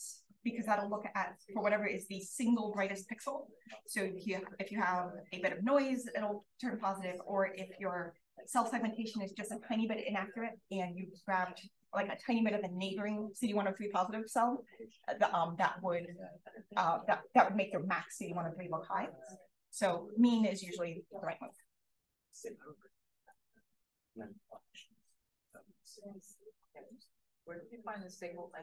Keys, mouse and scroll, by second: 0.7-1.2 scroll up 1, 1.2-2.4 scroll up 1, 4.6-6.3 scroll up 1, 6.3-7.7 scroll up 1, 7.7-17.9 scroll up 1, 17.9-19.8 scroll up 1, 19.8-20.6 scroll up 1, 20.6 click, 20.6-23.0 scroll up 1, 23.0-24.5 scroll up 1.